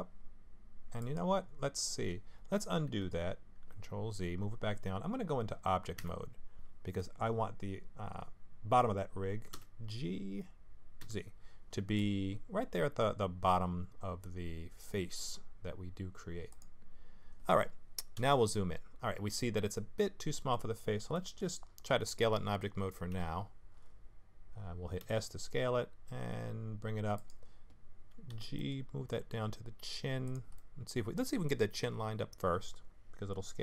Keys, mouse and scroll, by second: 1.4-3.0 scroll down 14, 3.7 ctrl+z, 6.0 Tab, 9.5 g, 18.1 KP_Decimal, 19.4 middle click, 21.1 middle click, 23.1 KP_1, 25.0 s, 28.3 g, 30.5 middle click, 31.8 KP_3.